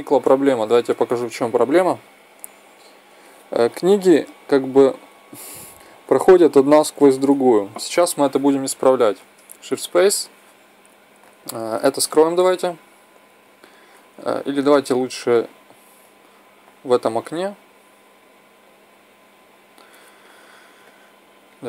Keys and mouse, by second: 0.6 shift+space, 1.6-2.5 Right, 3.2 Left, 3.5 Left, 4.2 Right, 4.5 Right, 4.9 Left, 5.2 Left, 5.6 Right, 5.9 Right, 6.1 Right, 6.6 Left, 6.8 Left, 6.9-7.4 Left, 9.5 shift+s, 18.7-21.0 drag, 21.4 drag.